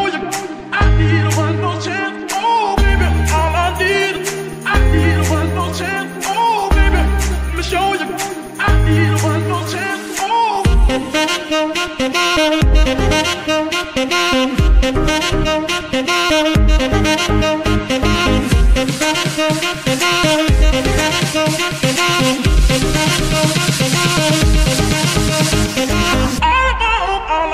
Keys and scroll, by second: 9.0 shift+Tab, 9.3 shift+z, 10.0 Tab, 10.8 ctrl+shift+Tab, 10.9 ctrl+shift+s, 15.6 a, 17.7 z, 26.8 z.